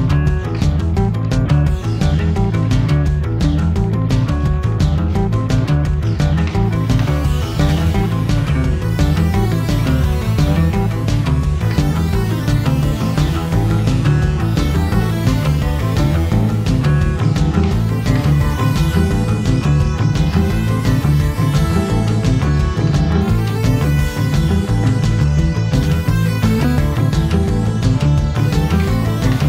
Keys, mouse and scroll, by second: 0.0-0.8 typing, 0.3 middle click, 0.7 middle click, 1.1 shift+middle click, 1.3 alt+shift+click, 1.4 ctrl+e, 1.5 shift+middle click, 1.6 shift+click, 1.7 shift+middle click, 1.9 click, 1.9 ctrl+e, 2.0 shift+middle click, 2.1 shift+click, 2.2 shift+click, 2.3 shift+middle click, 2.4 shift+click, 2.6 shift+middle click, 2.7 scroll up 2, 2.8 shift+click, 2.9 ctrl+e, 3.0 middle click, 3.1 click, 3.3 shift+click, 3.4 ctrl+e, 3.5 middle click, 3.6 KP_3, 3.7 scroll up 1, 3.8 g, 3.9 alt+click, 4.0 middle click, 4.1 g, 4.1 middle click, 4.3 alt+shift+click, 4.4 shift+middle click, 4.5 scroll down 1, 4.7 alt+shift+click, 4.8 scroll up 1, 4.9 middle click, 5.0 shift+click, 5.1 middle click, 5.2 click, 5.3 shift+click, 5.4 shift+middle click, 5.9 alt+click, 6.2 shift+middle click, 6.6 scroll down 3, 6.7 middle click, 6.8 alt+click, 6.9 middle click, 7.1 shift+click, 7.2 middle click, 7.4 shift+click, 7.6 middle click, 7.6 scroll up 2, 7.7 middle click, 8.1 scroll up 1, 8.3 shift+middle click, 8.4 shift+click, 8.5 middle click, 9.0 shift+click, 9.1 shift+click, 9.2 middle click, 9.3 shift+click, 9.3 shift+click, 9.4 scroll down 2, 9.4 shift+middle click, 9.6 alt+click, 9.7 middle click, 9.9 scroll up 2, 10.1 1, 10.2 middle click, 10.3 scroll down 1, 10.4 shift+click, 10.4 ctrl+e, 10.5 middle click, 10.8 shift+click, 10.9 ctrl+e, 11.0 shift+click, 11.1 shift+click, 11.2 ctrl+e, 11.2 middle click, 11.4 scroll up 1, 11.4 click, 11.5 ctrl+e, 11.7 middle click, 11.7 click, 11.9 middle click, 12.0 a, 12.2 middle click, 12.4 shift+click, 12.5 shift+middle click, 13.0 click, 13.2 middle click, 13.4-20.3 typing, 13.4 alt+click, 13.5-13.9 scroll down 4, 13.6 shift+middle click, 13.9 middle click, 14.4 middle click, 14.5 middle click, 14.5 click, 14.7 middle click, 14.9 middle click, 15.1 middle click, 15.2 click, 15.2 middle click, 15.4 scroll up 1, 15.4 click, 15.5 middle click, 15.6 click, 15.8 shift+middle click, 15.9 Tab, 16.0 shift+middle click, 16.3-16.9 scroll down 2, 17.4 click, 17.5 scroll up 1, 17.7 Tab, 19.1 click, 19.2 Tab, 20.6 Tab, 20.7 shift+middle click, 21.0 Tab, 21.1 Tab, 21.6 u, 22.0 scroll up 5, 22.0 shift+middle click, 22.6 2, 22.7 middle click, 22.8 click, 22.9-23.3 scroll down 4, 24.2 click, 24.4 shift+middle click, 24.5 click, 24.6 a, 24.8 l, 24.9 middle click, 25.2 3, 25.2 middle click, 25.4 shift+click, 25.7 click, 26.5 middle click, 26.6 click, 26.7 middle click.